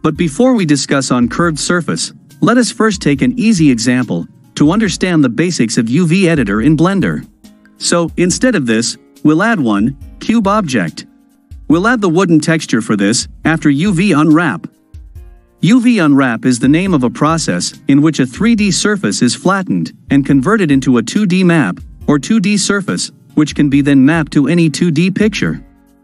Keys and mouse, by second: 3.1-5.2 ctrl+middle drag, 7.3 x, 8.8-10.6 drag, 11.8 ctrl+drag, 12.0 ctrl+middle drag, 12.1 ctrl+click, 12.3 ctrl+middle click, 13.2-14.4 shift+middle drag.